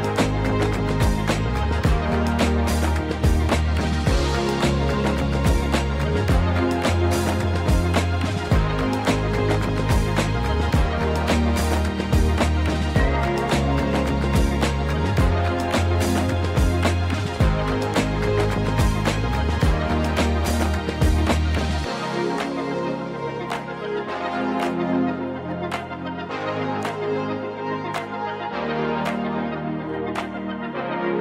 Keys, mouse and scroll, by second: 0.2-1.6 typing, 2.8 click, 3.6 KP_1, 4.5 KP_3, 6.3 shift+d, 6.7 right click, 7.0 f, 7.7 g, 8.1 z, 9.1 click, 10.0 shift+d, 11.6 click, 12.2-13.3 typing, 12.5 right click, 15.0 click, 15.7 click, 15.9 g, 17.0 click, 17.2 g, 18.6 shift+click, 19.1 shift+click, 19.5 shift+click, 20.2 shift+d, 26.5 click, 27.5 click, 28.0 g, 29.5 click, 30.0-30.8 scroll down 2, 30.8-31.2 middle drag.